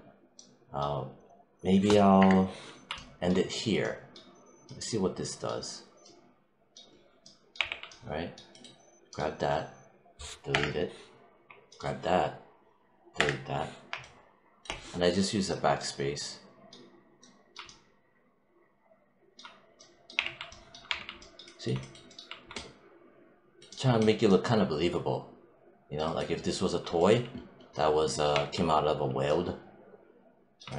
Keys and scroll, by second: 2.1 BackSpace, 7.4 w, 10.4 BackSpace, 13.0 BackSpace, 20.0 w, 20.7 3, 28.2 1.